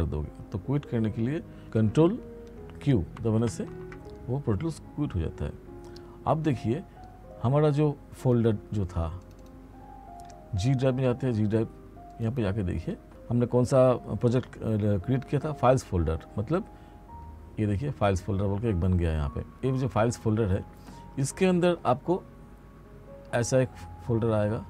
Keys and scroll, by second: 3.2 ctrl+q.